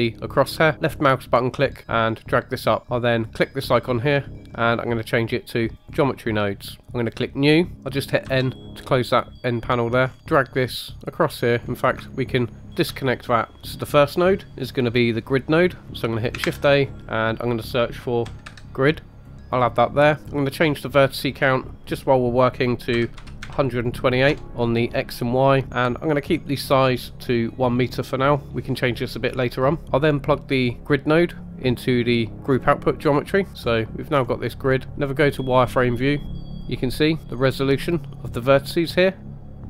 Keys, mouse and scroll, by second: 0.9 click, 3.4 click, 7.0 click, 8.2 n, 9.1 middle click, 10.0-10.3 scroll up 2, 10.2 middle click, 10.2 click, 12.3 ctrl+right click, 16.4 shift+a, 19.5 click, 20.5-24.3 drag, 31.3-31.6 drag, 33.5-34.3 scroll up 4, 35.6-36.6 drag, 36.6 shift+middle click, 37.9-39.6 drag.